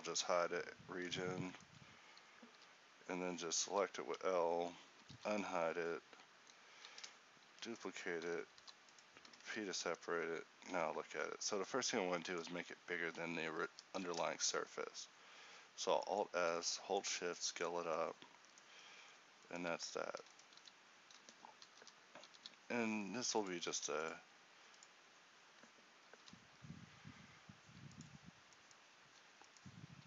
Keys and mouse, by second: 2.6 h, 3.7 l, 5.1 alt+h, 5.9 z, 8.7 p, 9.5 Tab, 12.7 Tab, 13.8 alt+s, 17.8 Tab, 18.8 Tab, 20.3 e, 20.7 s, 21.9 o, 22.4 s, 23.8 ctrl+r, 26.3 ctrl+b.